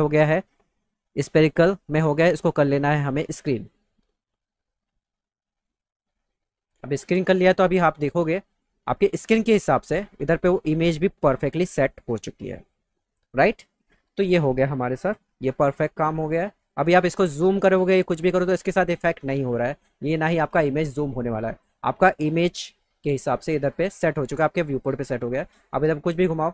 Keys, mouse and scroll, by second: 1.8 click, 3.1 click, 7.9 click, 17.3 middle click, 19.5 click, 23.6 click, 26.2-26.5 alt+middle drag.